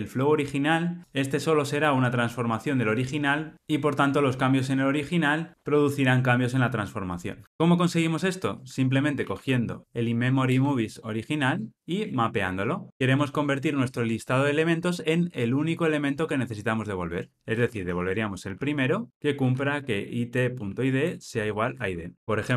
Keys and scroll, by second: 10.5 Return, 19.1 Return, 22.2 shift+F6.